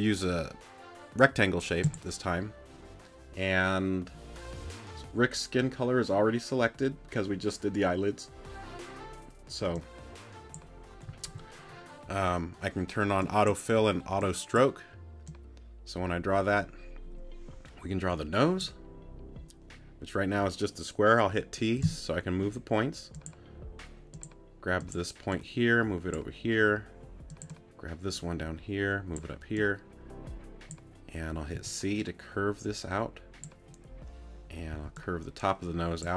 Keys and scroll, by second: 21.8 t, 31.5 c, 34.7 c.